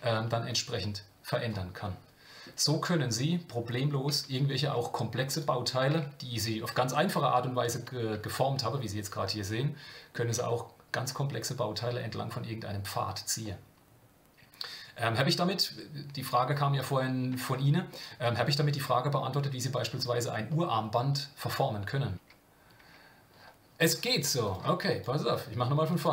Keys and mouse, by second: 1.8 middle click, 2.6 middle click, 4.7 Tab, 5.3 click, 6.3 KP_Decimal, 8.7-10.1 shift+middle drag, 13.4-16.9 middle drag, 17.9-20.0 middle drag, 20.5-22.1 middle drag, 22.2 Tab, 22.8 Tab, 24.0-26.1 drag.